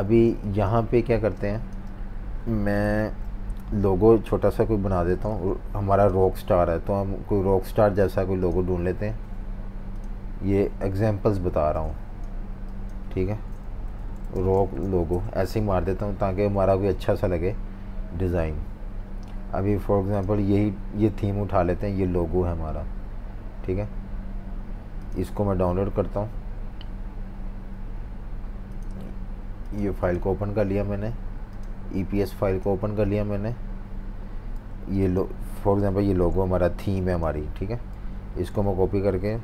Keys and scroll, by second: 1.1 typing, 2.9 super+-, 3.0 super+-, 5.1 typing, 13.6-14.7 typing, 16.0 typing, 34.5 v, 36.2 super+c, 38.2 super+v, 38.8 typing.